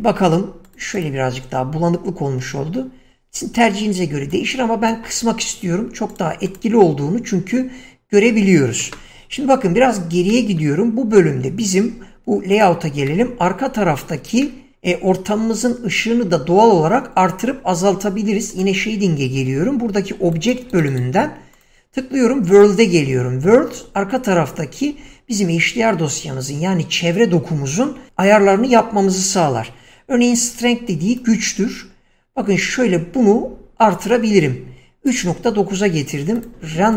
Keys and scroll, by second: 3.3 Escape, 8.5 Escape, 20.2 <.